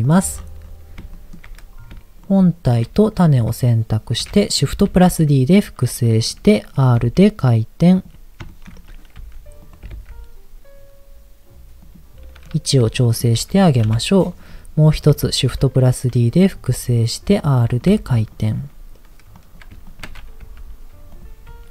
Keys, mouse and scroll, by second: 0.0 click, 0.4-1.0 scroll up 4, 1.1 shift+middle click, 1.4-1.9 scroll up 3, 2.2 shift+click, 3.3-4.1 scroll down 2, 5.4 shift+d, 6.2 click, 7.0 r, 8.0 click, 8.5 shift+middle click, 8.7 scroll up 3, 9.2 r, 9.6 click, 9.8 g, 10.0 z, 11.8 click, 12.4-12.8 scroll down 2, 12.9 shift+middle click, 13.8 KP_7, 14.4-14.8 scroll down 2, 15.7 shift+d, 16.4 click, 16.6 r, 17.7 click, 17.9 g, 18.3 click, 18.7-19.3 scroll up 2, 19.3 click, 19.8 ctrl+click, 20.4 g, 21.1 click, 21.4 e.